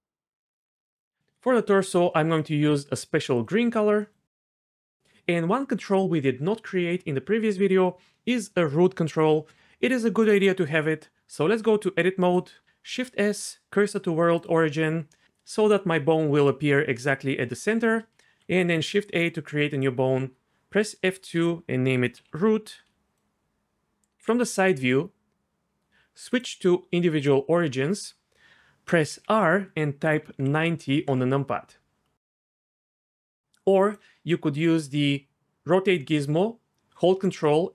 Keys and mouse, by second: 0.9-3.4 drag, 11.4 Tab, 12.9 shift+s, 18.8 shift+a, 19.7 click, 21.2 F2, 22.2 o, 24.2 KP_3, 26.3 click, 28.6 r, 29.1 r, 30.3 KP_9, 30.4 KP_0, 31.1 KP_Enter, 32.9 ctrl+z, 33.9 click, 36.8 ctrl+click.